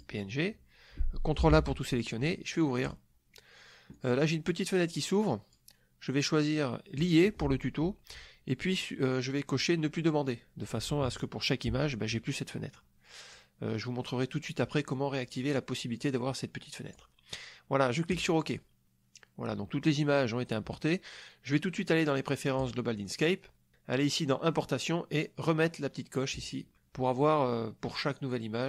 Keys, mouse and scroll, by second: 0.0 click, 1.5 ctrl+a, 2.8 click, 3.9-5.7 drag, 7.0 click, 12.7 click, 14.9-17.1 drag, 18.1 click, 22.6-23.3 drag, 26.3 click.